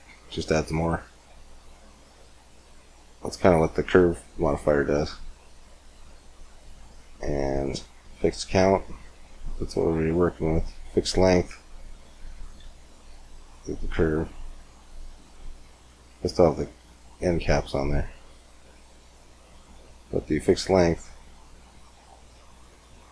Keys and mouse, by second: 2.8 Tab, 4.2-6.2 drag, 6.5-8.4 drag, 9.3-12.2 drag, 12.2 right click, 12.4 x, 13.1 click, 15.0-19.8 drag, 20.2-22.5 drag.